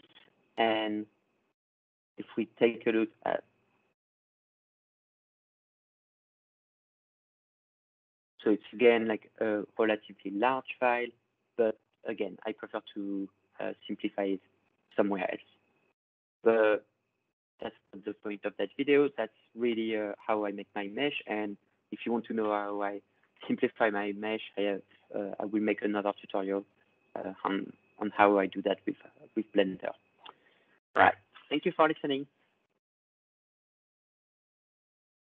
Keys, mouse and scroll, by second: 1.6 click, 6.6 click, 8.4 click, 15.0 click, 15.6-19.8 drag, 20.8-25.8 drag.